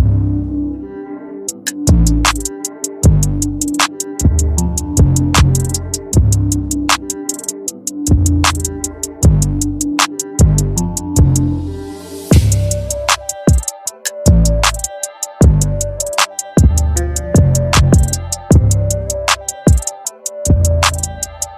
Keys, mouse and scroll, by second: 1.9 alt+shift+click, 2.1 z, 12.0 z, 12.6 click.